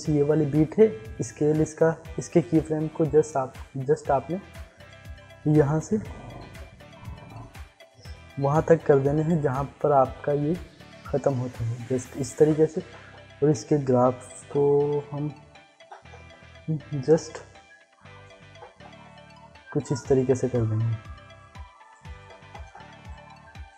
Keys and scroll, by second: 1.6 s, 22.4 ctrl+z.